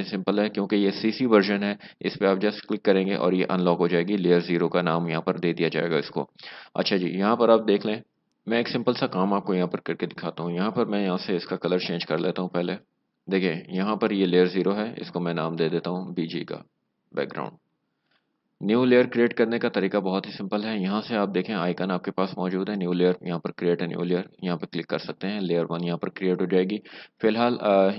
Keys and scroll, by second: 13.0 alt+BackSpace, 17.5 Return.